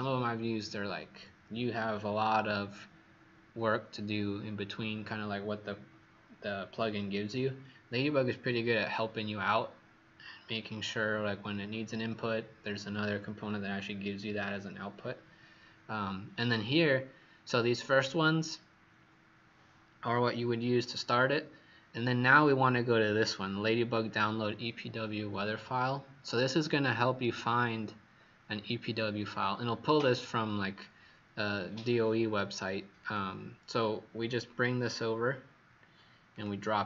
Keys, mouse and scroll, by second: 34.9-36.3 scroll down 1, 36.3 click.